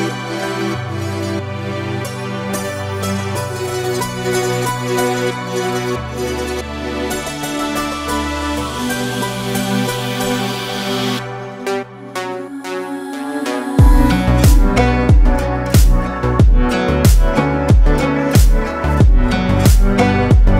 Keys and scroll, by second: 3.3 ctrl+space, 4.3 ctrl+space, 6.9 ctrl+z, 12.4 space, 14.3 ctrl+space, 18.1 ctrl+space, 19.0 ctrl+space, 19.8 ctrl+space.